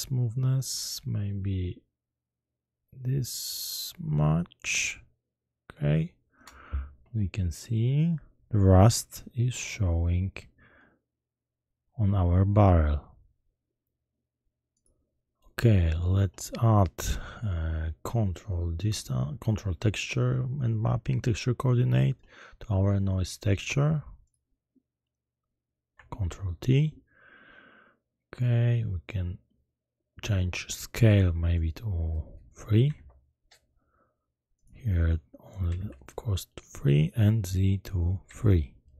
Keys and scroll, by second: 26.5 ctrl+t, 32.9 3, 33.0 Return, 35.7 3, 35.8 Return, 38.3 3, 38.3 Return.